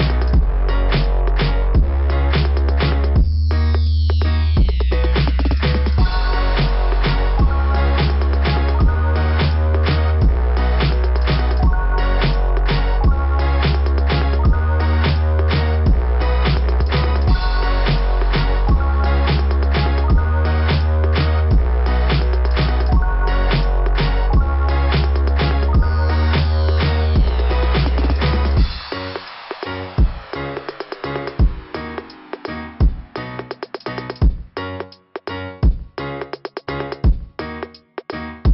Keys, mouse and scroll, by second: 5.4 click, 5.8 click, 6.4 click, 6.7 click, 11.3 click, 11.5 click, 11.7 click, 11.8 click, 12.0 click, 12.1 click, 12.3 click, 12.4 click, 12.6 click, 16.7 click, 17.0 click, 17.3 click, 17.7 click, 17.9 click, 18.2 click, 18.4 click, 18.5 click, 18.7 click, 18.8 click, 19.0 click, 19.1 click, 19.2 click, 21.7 click, 22.0 click, 22.2 click, 22.3 click, 22.5 click, 22.6 click, 22.8 click, 22.9 click, 33.8 click, 33.8 ], 34.4 click, 35.0 click, 35.3 click.